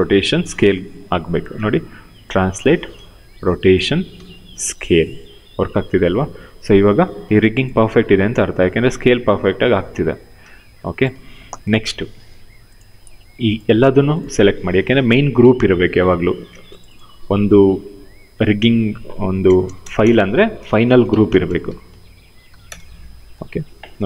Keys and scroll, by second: 1.2 w, 2.3 ctrl+z, 2.6 e, 3.5 ctrl+z, 3.8 r, 6.5 ctrl+z, 10.1 ctrl+z, 15.8 ctrl+g, 17.8 ctrl+v, 19.1 BackSpace, 20.3-22.0 typing, 22.3 Return.